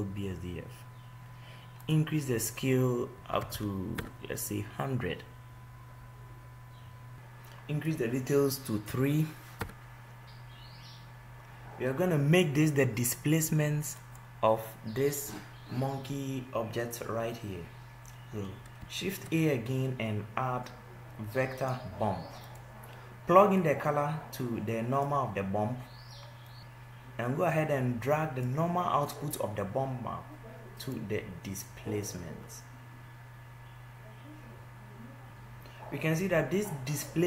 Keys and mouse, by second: 7.2 ctrl+z, 24.8 shift+a, 26.6 ctrl+z, 32.7-34.4 right drag, 35.3 ctrl+z.